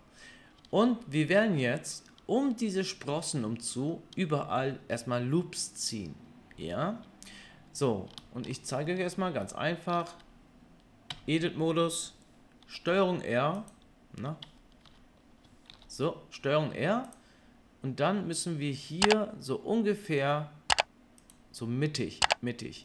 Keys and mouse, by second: 0.6 Tab, 0.8-2.4 drag, 8.2-13.5 shift+middle drag, 11.1 Tab, 12.7 ctrl+r, 13.5 click, 13.7-14.1 middle drag, 14.8 Tab, 15.7 ctrl+r.